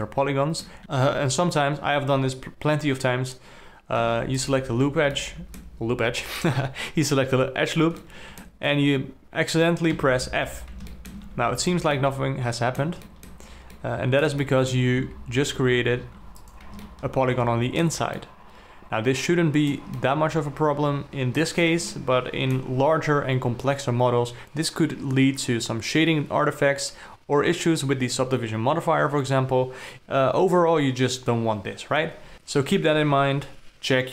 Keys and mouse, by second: 0.0 alt+middle click, 0.8 2, 0.8 z, 4.4 2, 4.8 alt+click, 5.6 alt+middle click, 8.4 alt+middle click, 10.4 f, 11.4 alt+middle click, 11.6 alt+a, 12.5 ctrl+middle click, 13.5 alt+middle click, 14.3 middle click, 14.8 alt+middle click, 15.4 z, 16.6 3, 16.8 click, 17.2-18.3 alt+middle drag, 18.7-20.1 ctrl+middle drag, 20.4 alt+click, 21.0 alt+middle click, 22.3 ctrl+middle click.